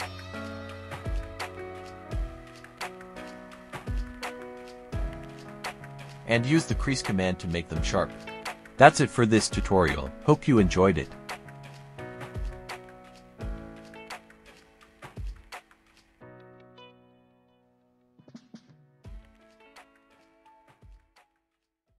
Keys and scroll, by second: 7.8-10.2 typing, 14.6 ctrl+alt+r.